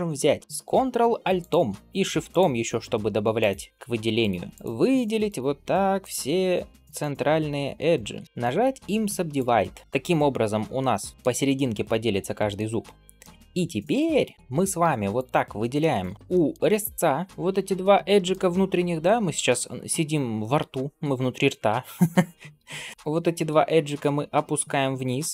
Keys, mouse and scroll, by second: 1.2 ctrl+alt+click, 2.1 ctrl+alt+shift+click, 3.2 ctrl+alt+shift+click, 4.0 ctrl+alt+shift+click, 5.1 ctrl+alt+shift+click, 5.8 ctrl+alt+shift+click, 6.8 ctrl+alt+shift+click, 8.3-9.3 right drag, 10.6 middle click, 11.9 scroll down 1, 12.2 shift+middle click, 12.9-14.0 scroll up 2, 13.1-14.3 middle drag, 15.0 alt+click, 15.6 middle click, 16.1 scroll down 2, 16.5-17.3 scroll up 3, 17.7 middle click, 18.2 scroll up 1, 18.3-19.2 scroll down 3, 19.0 scroll up 1, 19.6-21.3 scroll up 2, 21.3-21.7 scroll up 1, 22.7 middle click, 23.3 g.